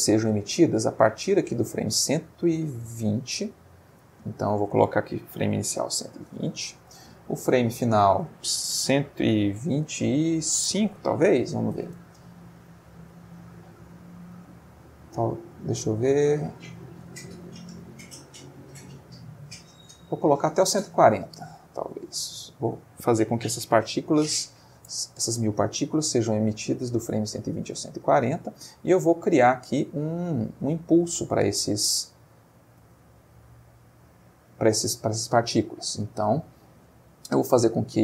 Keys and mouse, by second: 4.2 click, 5.3 1, 5.6 2, 5.8 0, 6.3 Return, 7.8 click, 9.0 1, 9.8 2, 11.3 5, 11.9 Return, 12.3 Right, 14.2 Right, 19.1 Left, 22.5 click, 23.3 1, 23.6 4, 23.8 0, 24.8 Return, 28.1 middle click, 35.5-36.8 middle drag.